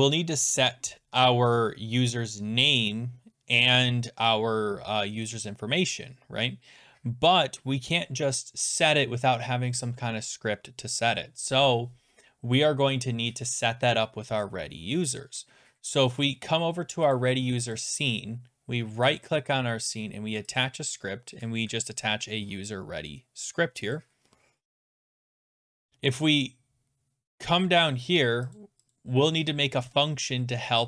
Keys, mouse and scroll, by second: 17.2 click, 17.7 click, 17.8 click, 19.1-20.5 scroll down 1, 20.6 click, 20.6 right click, 24.0 click, 25.2 click, 27.5-28.0 scroll down 7, 28.6 click, 28.9 click, 29.9 Return.